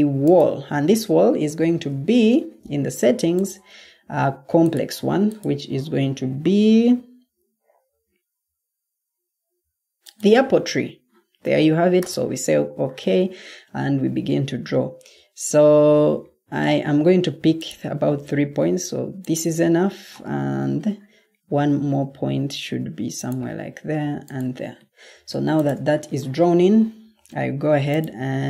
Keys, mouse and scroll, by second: 1.6 ctrl+t.